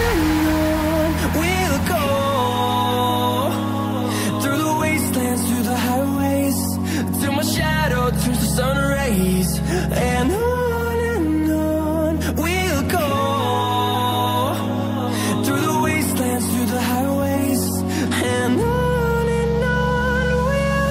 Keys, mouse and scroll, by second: 3.6 double click, 4.5 click, 4.8 double click, 5.1 scroll down 1, 5.6 scroll up 1, 6.2 scroll down 1, 6.8 click, 7.3 scroll up 1, 7.6 click, 9.5 click, 11.9 double click, 13.3 scroll down 1, 13.8 scroll up 1, 14.0 click, 14.2 double click, 17.1 click, 17.5 scroll down 1, 18.3 ctrl+v, 19.0 click.